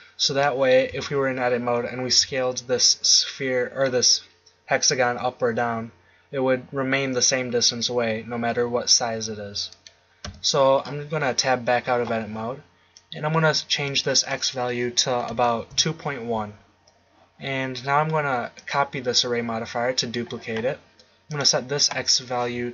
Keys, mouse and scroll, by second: 0.9 Tab, 2.1 s, 9.8-11.7 drag, 10.2 Tab, 12.9 click.